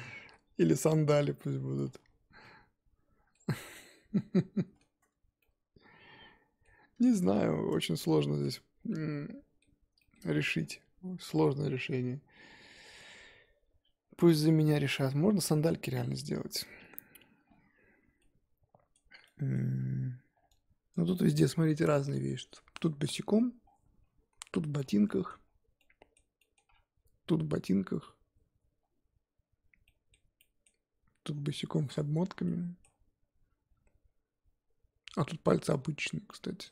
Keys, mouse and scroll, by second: 0.2 ctrl+z, 0.7 middle click, 1.0 z, 1.9 2, 2.4-3.6 middle drag, 3.6 z, 4.2 middle click, 5.0 Tab, 5.4-7.1 middle drag, 7.1 Tab, 7.7 Tab, 8.0 scroll down 4, 8.5 x, 8.7 scroll down 5, 8.9-16.0 middle drag, 16.0 scroll up 5, 16.6-20.6 shift+middle drag, 30.6-36.7 middle drag.